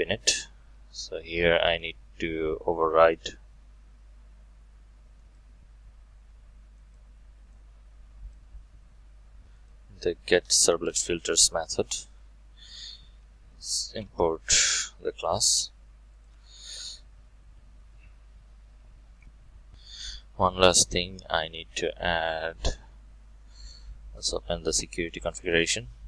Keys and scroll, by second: 0.6 Tab, 10.3 Tab, 11.9 ctrl+v, 13.8 alt+Return.